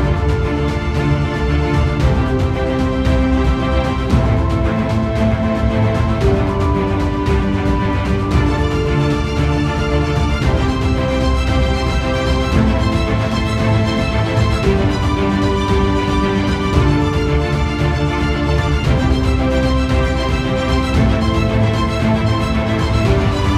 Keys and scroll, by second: 21.2 ctrl+t.